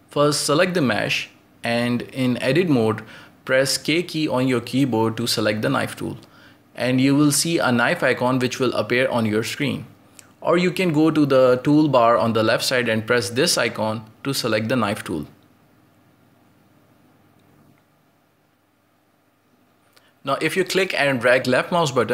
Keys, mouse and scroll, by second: 0.0-1.0 scroll up 2, 1.0-3.2 shift+middle drag, 3.2 right click, 4.9 Tab, 6.2-7.1 scroll up 1, 7.1 k, 15.2-20.7 drag, 20.7-21.2 scroll up 1, 21.2-22.1 shift+middle drag.